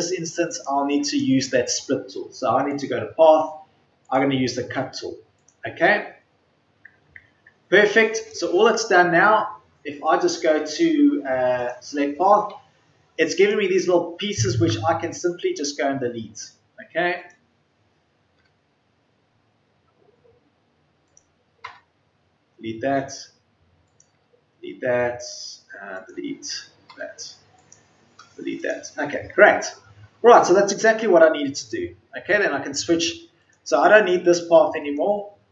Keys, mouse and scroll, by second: 12.4 Delete, 18.3 Delete.